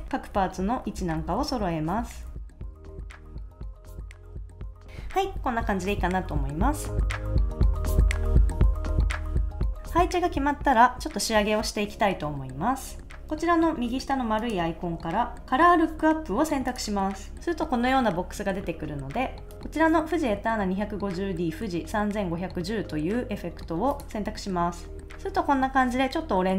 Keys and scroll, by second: 0.5 Left, 0.8 Down, 1.3 Left, 1.5 Right, 2.1 Left, 2.3 super+s, 2.5 Up, 2.7 super+s, 2.7 shift+Right, 2.8 Up, 3.0 super+s, 3.2 Left, 3.4 super+s, 3.5 super+s, 3.9 super+s, 4.2 shift+Up, 4.2 Down, 4.7 Right, 4.8 super+s.